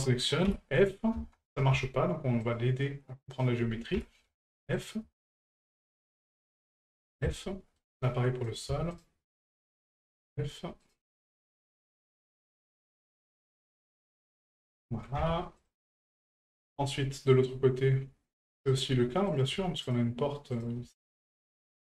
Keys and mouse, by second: 2.4 shift+right click, 3.3 shift+right click, 4.7 right click, 5.3 shift+right click, 5.9 shift+right click, 6.3 shift+right click, 7.3-7.8 shift+middle drag, 8.5 right click, 8.9 shift+right click, 9.6 shift+right click, 10.8 right click, 11.4 shift+right click, 11.9 shift+right click, 12.9 shift+right click, 13.8 shift+right click, 14.8 shift+middle drag, 16.0 shift+middle drag, 16.4-16.7 middle drag, 17.3 middle drag, 18.5 shift+middle drag, 19.3 right click, 19.8 shift+right click, 20.5 shift+right click, 21.8 right click.